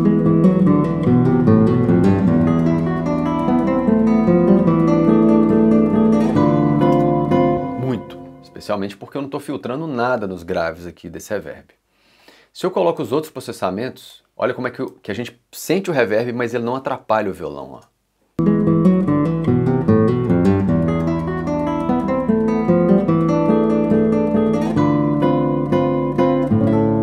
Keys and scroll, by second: 6.9 space, 17.8 space.